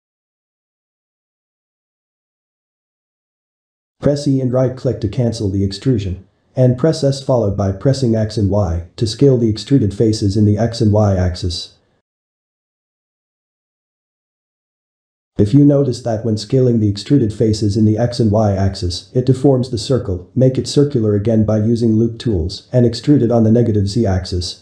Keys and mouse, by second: 0.6-2.4 shift+middle drag, 2.4 i, 5.1 e, 7.4 s, 12.3-14.7 middle drag, 14.7 s, 17.9-20.9 middle drag, 21.2 e, 23.5-24.6 middle drag.